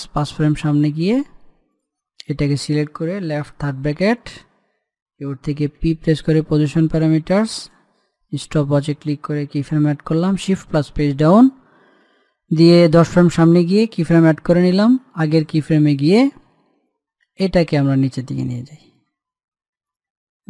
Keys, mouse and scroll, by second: 2.5 click, 4.5 [, 6.6 p, 8.4 click, 11.2 shift+Page_Down, 14.7 click, 18.3-20.4 drag.